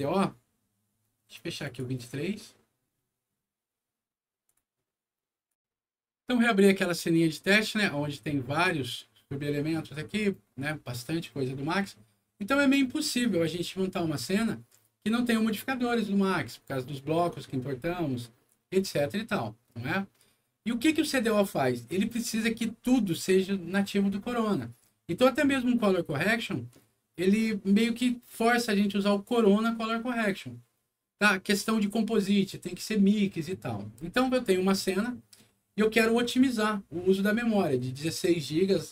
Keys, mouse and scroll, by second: 1.5 click, 4.4 click, 5.4 click, 7.1 click, 8.1 click, 8.5 click.